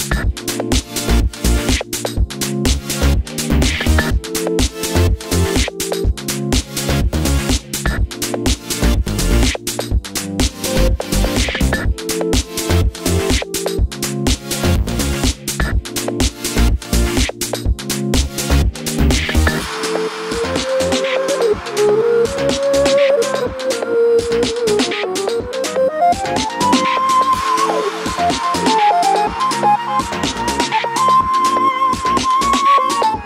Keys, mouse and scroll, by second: 0.8 click, 1.3 ctrl+s, 4.0 click, 5.9-11.0 drag, 6.4 KP_Enter, 18.5 click, 25.3 KP_Enter, 25.3 click.